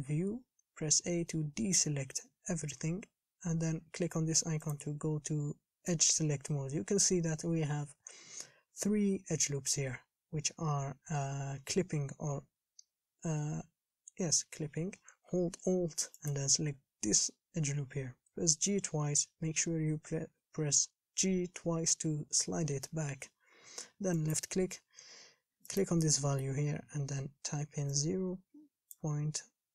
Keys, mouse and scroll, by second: 0.0-0.5 scroll up 3, 0.5 a, 4.9 click, 16.5 alt+click, 18.7 g.